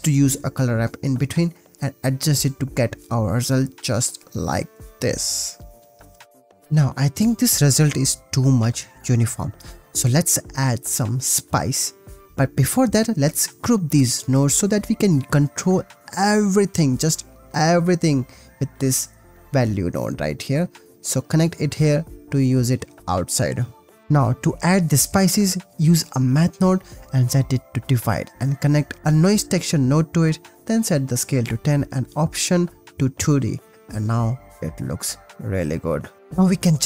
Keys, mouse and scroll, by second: 0.3-1.2 drag, 1.6-1.9 drag, 2.5-4.3 drag, 4.8-6.3 drag, 7.4 click, 10.6 click, 12.2 ctrl+z, 12.2 g, 12.4 click, 12.9 shift+click, 13.8 click, 14.1 click, 14.3 g, 14.6 click, 14.7 click, 14.9 click, 15.3 drag, 17.5 ctrl+g, 18.1-20.6 drag, 21.0-21.6 drag, 21.9 Tab, 22.5 click, 22.7 ctrl+s, 24.0 shift+a, 24.5 click, 25.8 click, 26.0 shift+a, 27.9 click, 28.4-29.0 drag, 29.2 click, 30.4 click, 31.9 click, 33.1-33.9 drag, 35.1 ctrl+s, 36.2-36.8 drag.